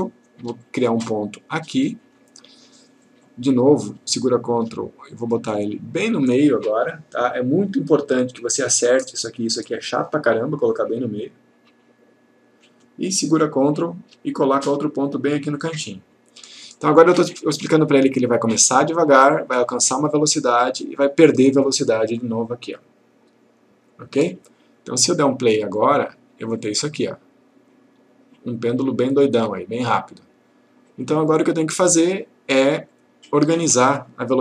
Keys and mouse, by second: 0.0 click, 0.7-2.2 click, 4.3 ctrl+click, 13.7 ctrl+click, 25.9 click, 31.8 click.